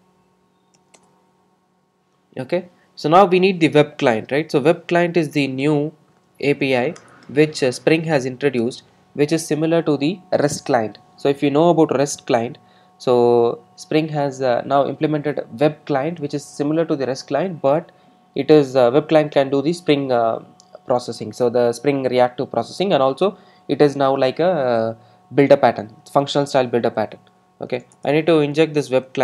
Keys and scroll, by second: 7.1 Return.